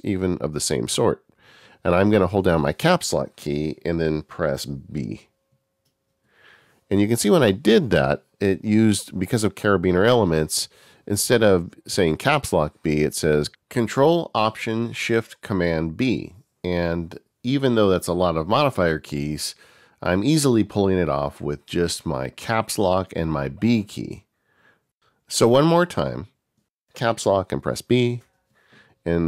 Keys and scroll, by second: 27.9 ctrl+alt+shift+super+b.